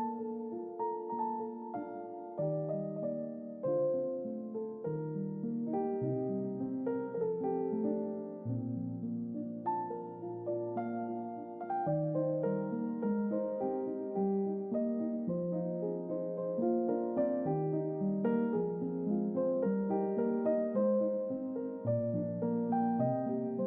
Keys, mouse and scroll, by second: 8.4-9.0 middle drag, 10.0-12.4 drag, 13.1 ctrl+middle click, 14.2-15.7 drag, 16.1-19.7 middle drag, 20.3-21.4 middle drag, 22.1 middle click, 23.1 middle click, 23.1-23.6 scroll down 2.